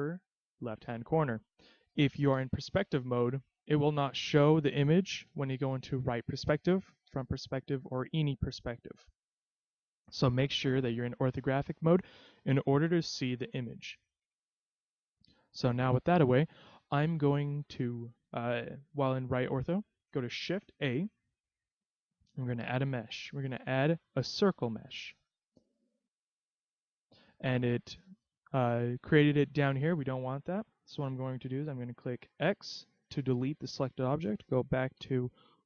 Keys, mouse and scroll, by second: 2.1 scroll up 1, 2.4 KP_5, 3.1-3.7 scroll down 3, 3.4 middle click, 4.4 middle click, 5.4 KP_3, 7.0 KP_1, 8.7 KP_3, 13.0 KP_5, 13.6-15.1 scroll up 6, 15.1-16.1 scroll down 2, 20.7 shift+a, 26.3-27.1 scroll down 4, 27.6 middle click, 32.5 x, 34.9 KP_3.